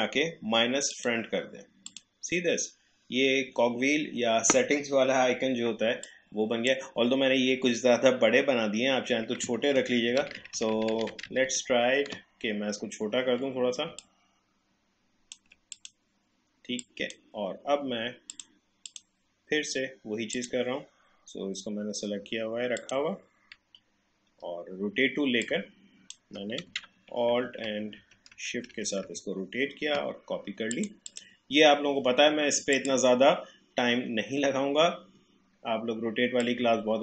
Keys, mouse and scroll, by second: 6.1-9.3 drag, 9.4 click, 9.8 ctrl+z, 14.0-22.6 alt+drag, 22.8 click, 25.4 alt+click, 27.3 ctrl+d, 30.7 click, 36.4-37.0 drag.